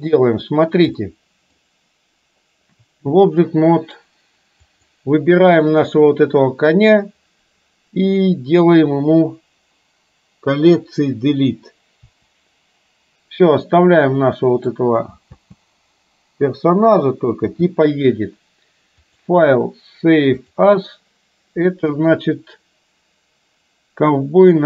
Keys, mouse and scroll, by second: 1.1 middle click, 4.7 click, 12.1 Delete, 13.6-14.7 middle drag, 15.3 space, 17.5 space, 19.1-20.8 drag.